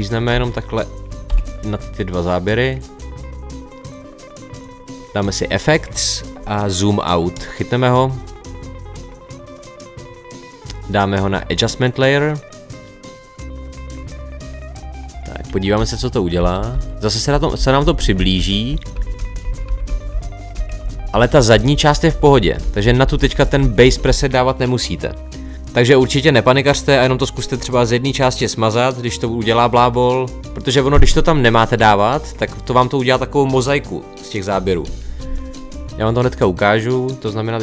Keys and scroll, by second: 1.3 Delete, 15.8 Right, 16.4 Left, 22.6 Right.